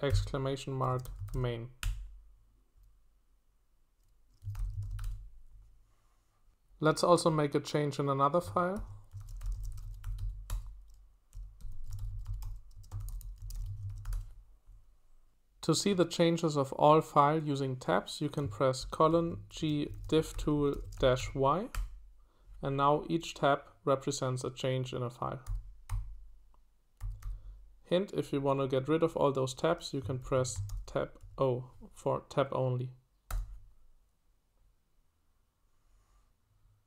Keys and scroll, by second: 0.0-1.8 typing, 4.5 ctrl+w, 5.0 q, 8.5-14.5 typing, 18.8-21.7 typing, 25.4-27.7 typing, 29.9-31.7 typing, 33.3 Return.